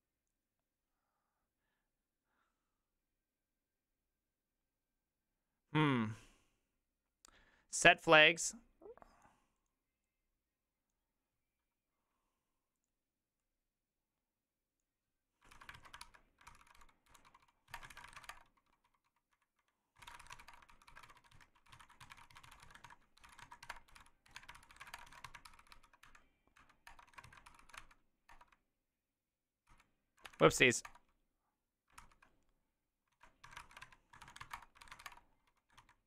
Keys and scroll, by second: 15.8 ctrl+c, 15.8 alt+{, 16.0 ctrl+c, 16.5 ctrl+c, 16.5-25.3 typing, 25.5 ctrl+c, 25.6 ctrl+c, 25.7 ctrl+c, 26.1 Up, 26.6 Up, 26.9 Return, 27.1 ctrl+a, 27.3 3, 27.5 ctrl+c, 27.6 ctrl+c, 27.8 Up, 28.3 Return, 29.7 ctrl+c, 30.3 Up, 30.4 Up, 30.9 Return, 32.0 ctrl+c, 33.2 ctrl+a, 33.2-36.0 typing, 35.1 Return.